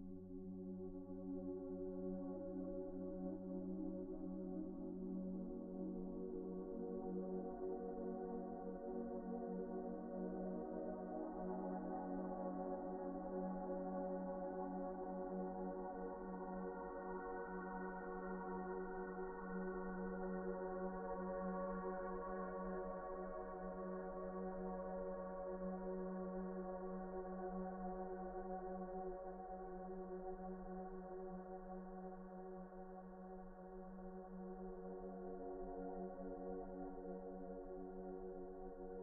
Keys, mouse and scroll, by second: 0.9-1.2 scroll down 1, 2.0-3.0 scroll up 1, 3.4 shift+middle click, 3.9 typing, 4.8 right click, 5.2 Escape, 6.3 typing, 7.0 Escape, 9.3 Return, 10.0 typing, 10.7 Return, 11.5 typing, 12.0 Return, 12.7 typing, 13.2 Return, 13.5-14.0 scroll down 1, 14.0 right click, 15.9 Tab, 16.2 Tab, 17.1-17.5 scroll up 1, 17.5 shift+middle click, 18.0-18.4 scroll down 1, 19.0 Tab, 19.5-19.8 scroll up 1, 19.8 Tab, 20.2 shift+middle click, 20.7-21.5 scroll up 1, 21.5 alt+a, 21.9 alt+shift+click, 23.3 alt+shift+click, 24.9 right click, 25.6 Tab, 27.8 typing, 30.3 middle click, 31.0-31.4 scroll up 1, 31.4 middle click, 32.3-32.6 scroll up 1, 32.7 alt+z, 33.5 ctrl+z, 33.6 ctrl+z, 35.0 middle click, 37.2 Tab.